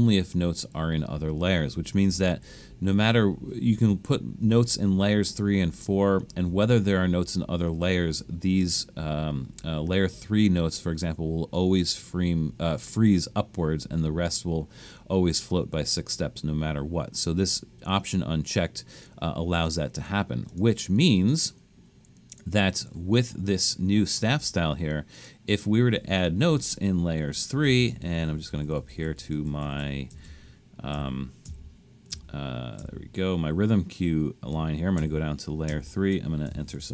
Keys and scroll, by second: 27.2 Down, 27.5 Up, 27.6 Up, 27.8 Up, 27.9 Up, 28.0 Up, 28.3 Up, 28.4 Up, 28.5 Up, 28.6 Up, 28.8 Up, 28.9 Up, 29.0 Up, 29.2 Up, 29.3 Up, 29.6 Up, 29.8 Up, 30.1 Up, 30.3 Up, 31.0 Up, 31.5 Up, 32.1 Up, 32.8 Up, 35.0 shift+Down, 35.7 shift+Down, 36.5-36.9 typing.